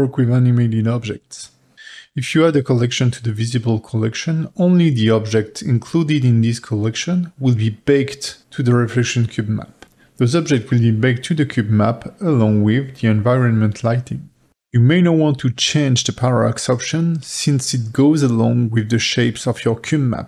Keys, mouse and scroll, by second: 0.0-1.4 drag, 1.5 click, 4.3-14.6 drag, 18.1 click.